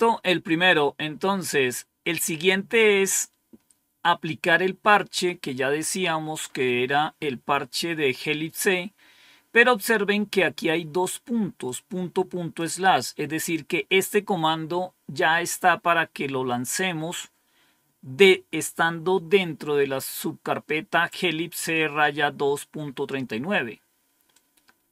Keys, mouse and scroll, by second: 0.3-1.1 scroll down 1, 1.1-1.6 scroll down 1, 6.3-6.8 scroll up 1, 11.5 click, 12.7 click, 15.6-22.7 scroll down 3, 24.2-24.9 drag.